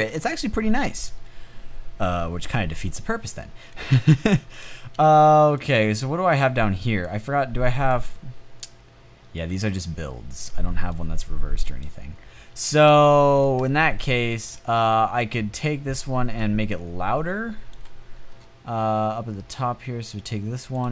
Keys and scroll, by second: 12.0-12.7 typing.